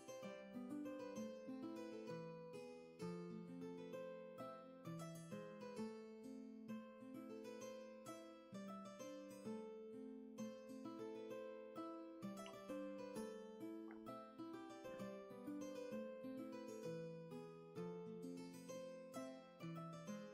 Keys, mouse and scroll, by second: 3.2 space, 5.0 space.